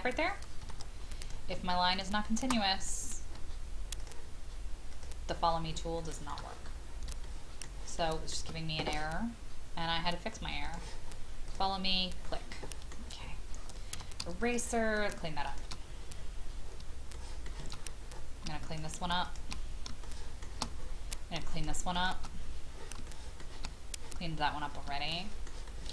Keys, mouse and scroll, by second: 0.6 scroll up 1, 1.2 click, 4.0 shift+click, 4.9 shift+click, 5.4 shift+scroll down 1, 5.9 shift+middle click, 6.2 shift+middle click, 6.3-7.1 shift+scroll down 1, 7.2 shift+middle click, 8.0 shift+middle click, 10.6 click, 11.8-12.3 scroll down 1, 12.5 middle click, 13.2-13.9 scroll up 1, 13.9 typing, 14.4 shift+click, 15.0 shift+click, 15.5 shift+click, 15.8-16.4 scroll down 1, 16.9 shift+scroll down 1, 17.7-18.5 scroll up 1, 18.6 shift+click, 19.2 shift+click, 20.0 shift+middle click, 20.8-21.2 scroll up 1, 21.5 shift+click, 21.9 shift+click, 22.3-22.9 scroll down 1, 23.0 shift+middle click, 24.3-24.8 scroll down 1, 25.1 shift+middle click, 25.6 shift+middle click.